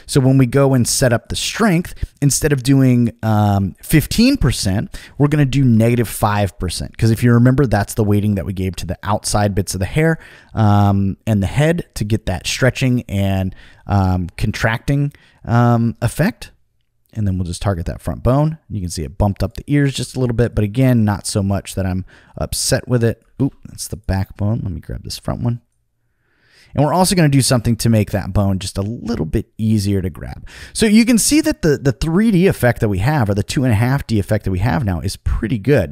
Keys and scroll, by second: 5.8 5, 23.3 super+z.